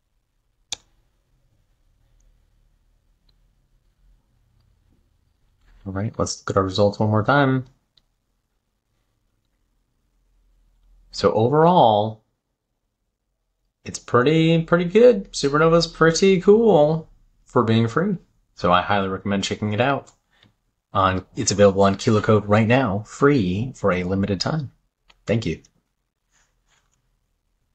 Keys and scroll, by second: 0.1 super+v.